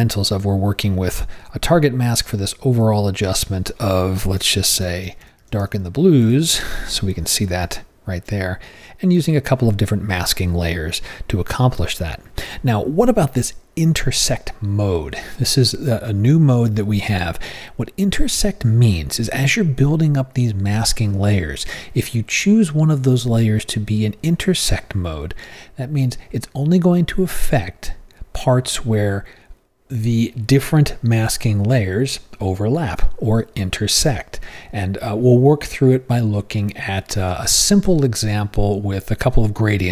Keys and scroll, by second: 4.6-7.0 typing.